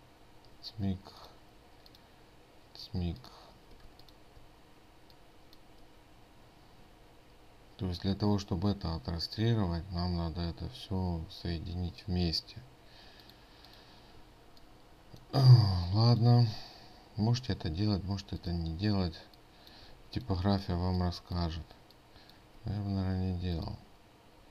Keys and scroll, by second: 4.3 ctrl+space.